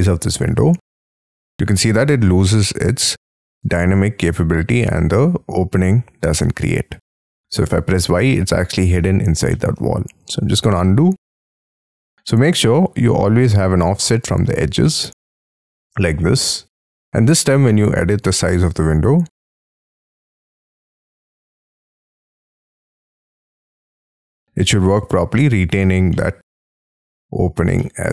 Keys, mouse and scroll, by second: 7.0 middle click, 7.8 y, 8.9 u, 9.5 middle click, 9.7 space, 10.2 ctrl+z, 12.1 n, 12.7 m, 14.2 shift+click, 14.8 middle click, 15.3 middle click, 15.8 middle click, 16.4 scroll up 3, 16.5 space, 16.8 scroll down 6, 17.4 s, 20.9 double click, 24.6 middle click, 26.1 middle click, 27.1-27.8 scroll down 9, 27.8 middle click.